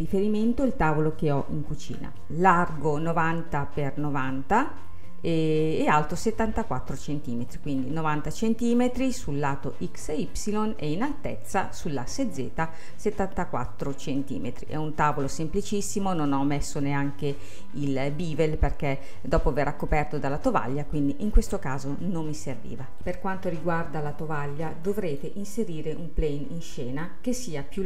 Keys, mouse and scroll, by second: 1.9 n, 2.3-4.2 middle drag, 4.9-13.5 middle drag, 14.0-16.1 middle drag, 16.1-18.2 scroll up 2, 18.2-23.0 middle drag, 25.0 click, 25.6-26.4 scroll down 7, 26.4-27.8 middle drag.